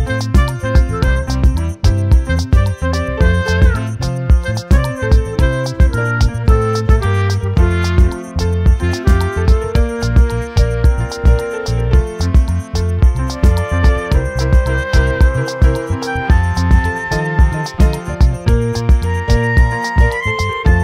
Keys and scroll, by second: 13.5 ctrl+j, 15.1 ctrl+j, 15.9 t.